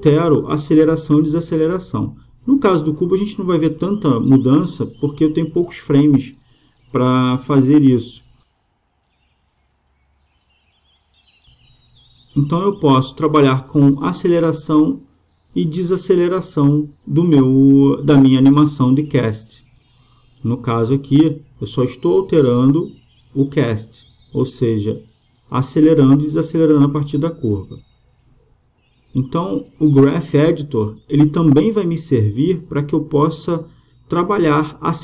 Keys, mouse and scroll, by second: 1.3-3.1 drag, 3.6-7.8 drag, 11.1-12.9 right drag, 12.9 g, 15.8-17.5 drag, 18.1-23.0 drag, 22.3-24.2 right drag, 23.3 g, 32.3-34.0 drag, 34.0-35.0 middle drag.